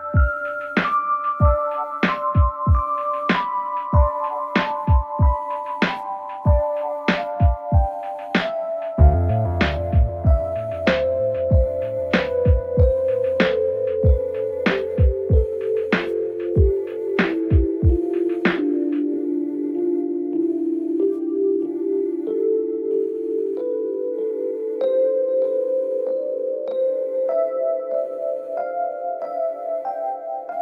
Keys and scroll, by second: 6.5 ctrl+c, 14.1 ctrl+z, 19.1 ctrl+v, 24.0 Up.